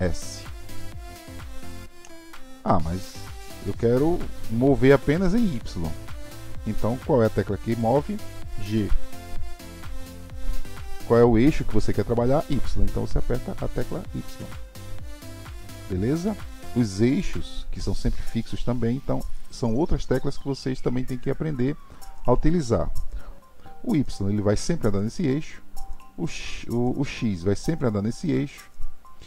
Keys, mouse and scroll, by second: 5.7 click, 9.4 g.